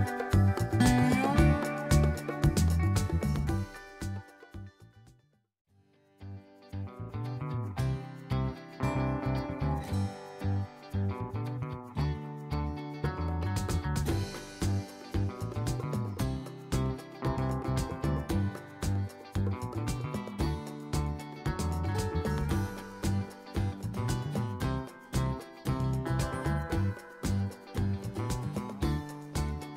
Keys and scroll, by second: 24.2 s, 27.9 s.